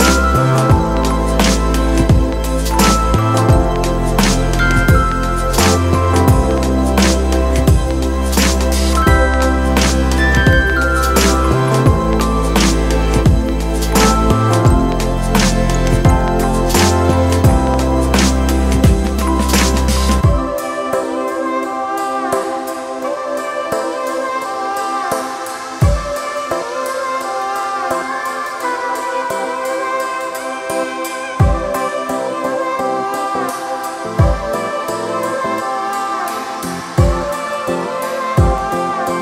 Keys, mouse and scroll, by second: 2.0 ctrl+d, 11.0 alt+shift+click, 20.3 ctrl+click, 22.6 ctrl+click, 24.0 ctrl+click, 36.1 ctrl+d.